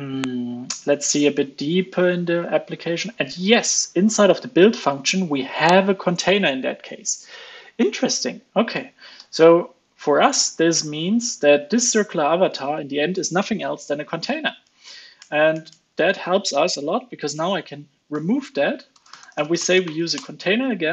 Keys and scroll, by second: 8.7 alt+super+Left, 9.1 alt+super+Left, 10.2 alt+super+Left, 11.0 alt+super+Left, 12.3 alt+Up, 12.5 alt+Up, 14.2 alt+Up, 20.8 ctrl+space.